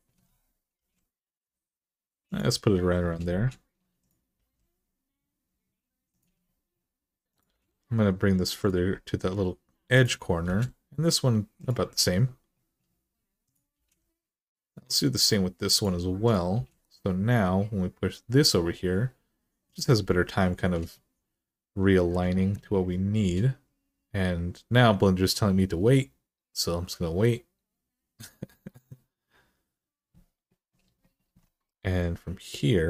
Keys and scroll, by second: 0.5 g, 4.1 g, 7.3 g, 10.2 g, 13.6 g, 16.3 g.